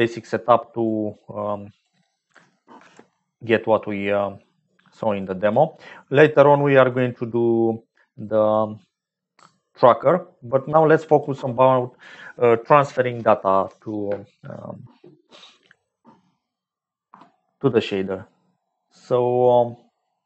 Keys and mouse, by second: 0.8 click, 2.7 ctrl+j, 4.1 click, 5.2 click, 6.1 click, 6.9 click, 8.5 click, 10.5 click.